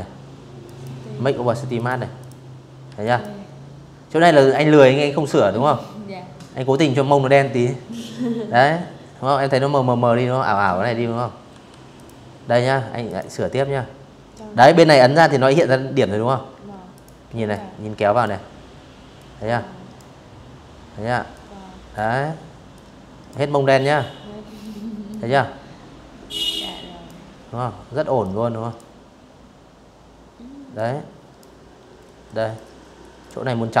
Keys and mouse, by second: 0.5 z, 0.7 click, 9.1 v, 9.6 click, 10.7 click, 14.2 a, 14.6 click, 15.1 click, 16.8 click, 19.0 click, 20.4 click, 22.3 click, 24.2 click, 25.9 click, 28.4 click, 30.2 click, 32.5 click, 33.4-33.8 typing.